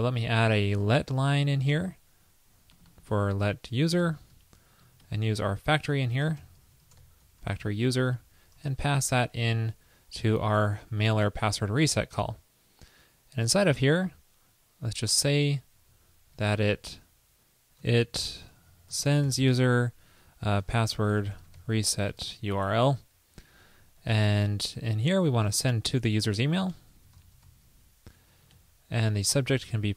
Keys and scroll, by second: 1.2 super+c, 1.8 super+v, 4.5 alt+Right, 5.2 alt+shift+Right, 8.1 alt+Right, 16.5 alt+Left, 18.0 alt+shift+Left, 18.1 alt+shift+Left, 24.2 alt+Right, 25.8 alt+shift+Left, 25.9 alt+shift+Left, 28.6 alt+Right.